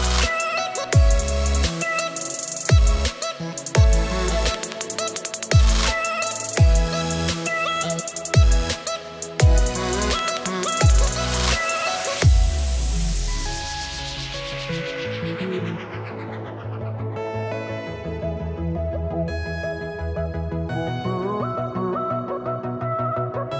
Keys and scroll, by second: 1.1-5.6 typing, 7.4 space, 9.1 space, 10.0 space, 10.4 space, 11.7-14.7 typing, 15.8-21.4 typing, 22.5 space, 23.2 space.